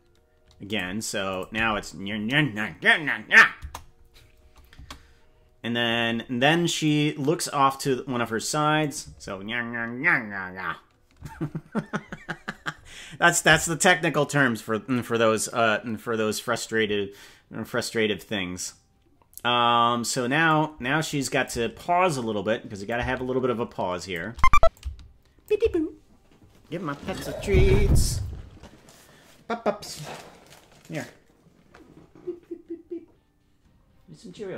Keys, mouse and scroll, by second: 1.3 click, 1.6 space, 3.6 KP_0, 4.8 space, 6.8 click, 8.8 click, 9.2 space, 11.2 space, 20.5-21.5 drag, 22.8-24.1 drag, 24.7 shift+click.